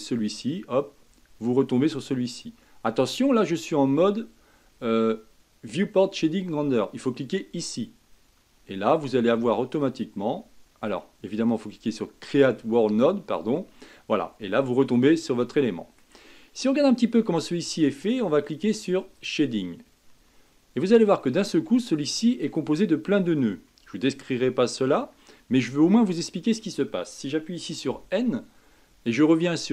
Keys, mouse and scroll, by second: 0.0-7.4 drag, 10.3-13.1 middle drag, 13.1-14.2 drag, 14.2-19.2 middle drag, 19.2 click, 27.9 n.